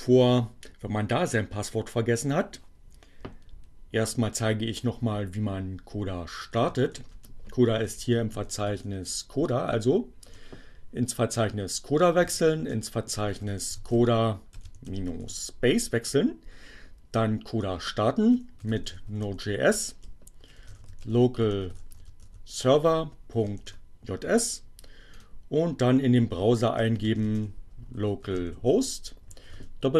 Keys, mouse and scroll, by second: 4.2-5.1 typing, 7.1-9.0 typing, 9.6 Return, 11.9-15.5 typing, 17.1-23.3 typing, 25.0 click, 26.1-29.0 typing.